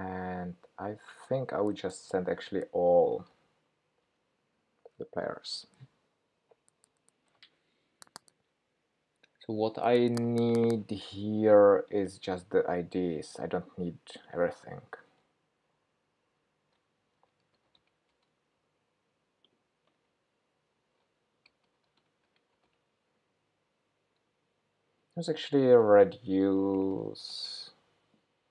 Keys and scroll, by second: 4.1 Return, 16.4 shift+super+9, 20.8 ctrl+k.